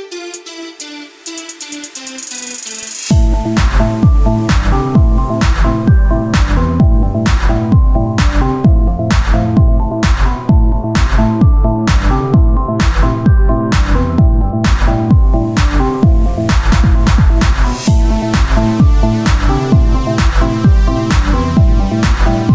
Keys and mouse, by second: 1.8 Tab, 2.7 Tab, 4.4-11.0 drag, 11.0 o, 11.8 s, 13.5-14.8 drag, 14.8 Tab, 18.0 KP_1, 18.3 z, 20.3 shift+a.